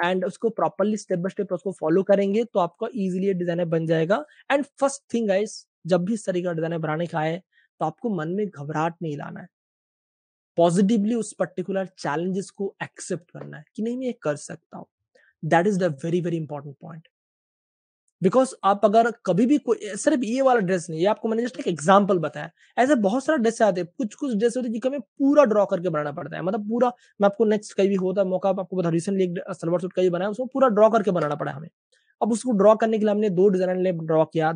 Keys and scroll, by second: 0.1 super+space, 0.6 space, 0.7 space, 0.8 space, 1.5 super+space, 2.4 space, 2.4 space, 2.6 space, 4.8 Page_Up.